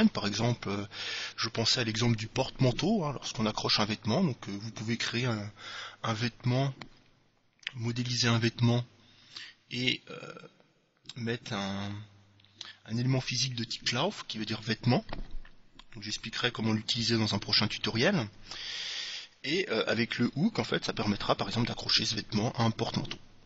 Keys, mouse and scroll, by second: 1.9-3.9 middle drag, 9.4-11.2 drag.